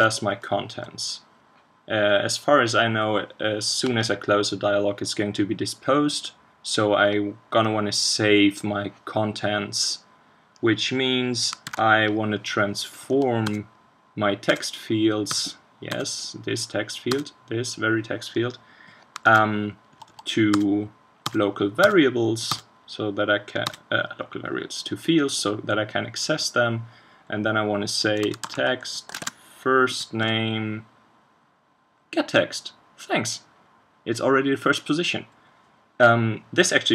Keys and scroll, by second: 11.7 super+1, 19.2 super+1, 29.1 ctrl+space.